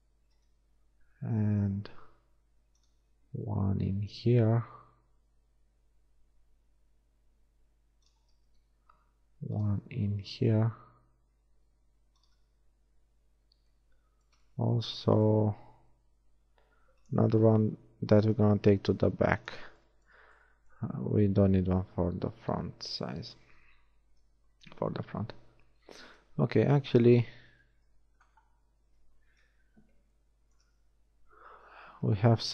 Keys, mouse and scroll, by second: 0.0 shift+middle click, 0.9 ctrl+shift+r, 9.0 ctrl+r, 12.9 a, 16.0 ctrl+r, 20.5 Tab, 25.5 Tab, 29.6 KP_1, 32.2 z.